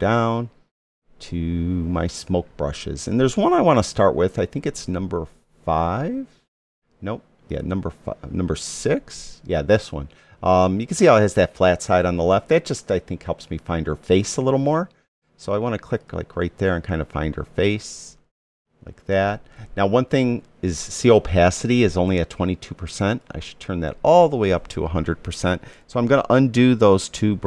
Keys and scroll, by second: 26.7 super+z.